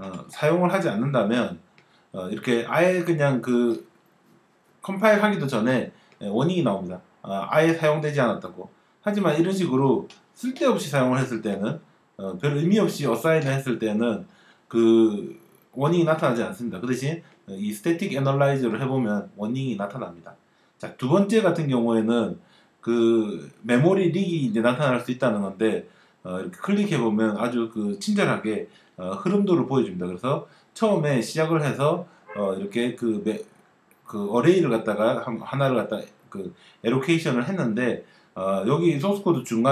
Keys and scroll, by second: 0.0 super+/, 10.1 ctrl+d, 13.1 ctrl+d, 17.9 space.